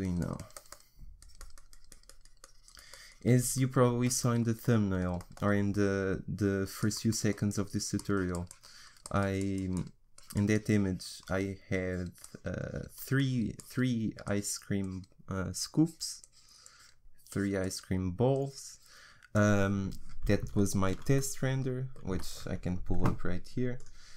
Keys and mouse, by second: 20.6 middle click.